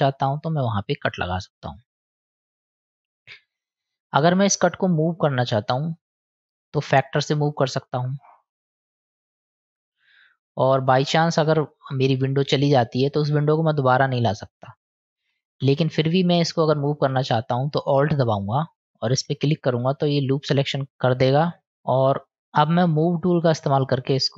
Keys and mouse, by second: 4.9 middle click, 7.2-9.7 drag, 11.0-12.7 middle drag, 13.1 click, 13.2 middle click, 13.3-14.7 drag, 14.7 middle click, 20.2-21.7 middle drag, 23.7 click.